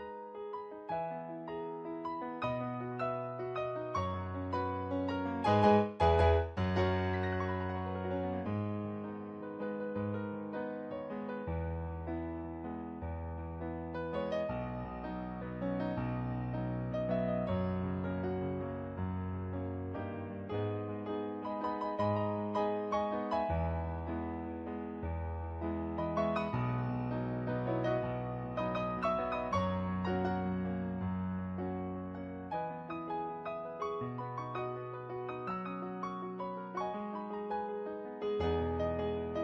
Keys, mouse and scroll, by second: 0.1 ctrl+z, 0.4 ctrl+z, 0.8 ctrl+z, 2.3 ctrl+z, 2.9 ctrl+z, 3.4 ctrl+z, 5.4 ctrl+z, 6.2 ctrl+z, 6.8 ctrl+z, 9.9 ctrl+z, 11.1 ctrl+z, 11.7 ctrl+z, 17.0 ctrl+z, 21.6 ctrl+z, 22.2 ctrl+z, 23.7 ctrl+z, 23.9 ctrl+z, 25.5 ctrl+z, 26.6 ctrl+z, 29.3 ctrl+z, 30.1 ctrl+z, 31.0 ctrl+z, 32.2 ctrl+z, 33.2 ctrl+z, 34.8 ctrl+z, 35.2 ctrl+z, 37.9 ctrl+z, 39.0 ctrl+z.